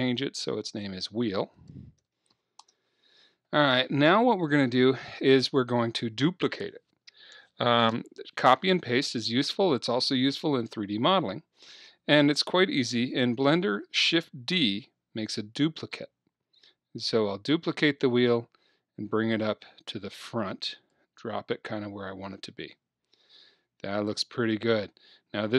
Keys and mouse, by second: 2.2 e, 14.6 shift+d, 20.9 click, 21.9-23.1 middle drag, 23.5 middle click.